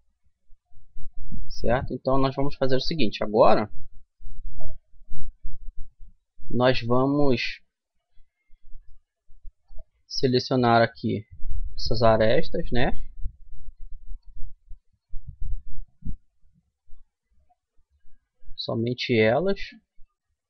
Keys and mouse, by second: 0.3-1.9 middle drag, 2.9-7.6 middle drag, 9.8-11.4 middle drag, 11.4-13.0 drag, 12.4 right click, 13.0-14.1 middle drag, 19.6-20.4 drag.